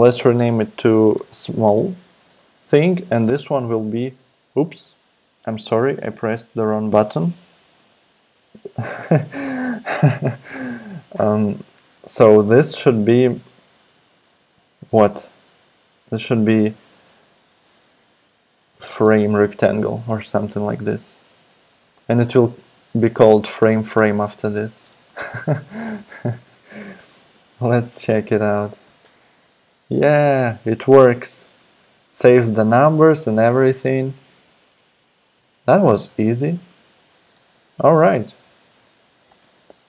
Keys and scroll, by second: 0.1 super+r, 0.6 Left, 0.9 Right, 1.1 BackSpace, 1.2 r, 1.6 Return, 16.3 super+r, 17.2 Left, 18.4-20.7 typing, 22.3 super+Left, 22.7 alt+Right, 23.6 Right, 24.2 alt+Left, 24.5 Right, 24.8 BackSpace, 25.2 shift+f, 25.8 Return, 28.8 alt+super+p, 37.3 BackSpace, 37.5 x, 39.3 super+Return.